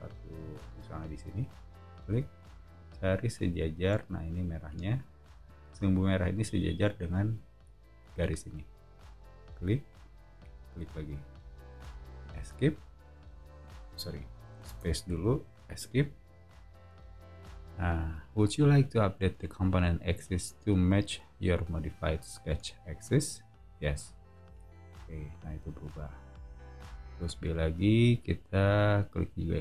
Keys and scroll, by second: 12.4 Escape, 14.7 space, 15.7 Escape, 27.2 b.